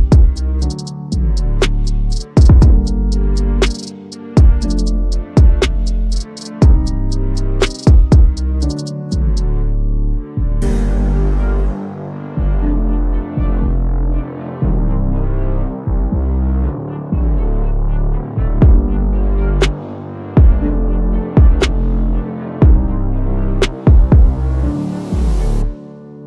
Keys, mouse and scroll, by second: 3.2 right click, 4.7 click, 5.7 right click, 6.1 click, 6.7-8.3 typing, 9.6 click, 11.5 click, 11.9-13.4 typing, 13.8 click, 16.3 2, 16.8 click, 18.7 click, 20.1 click, 21.6 ctrl+d, 22.6 click, 23.3 1, 25.0 click.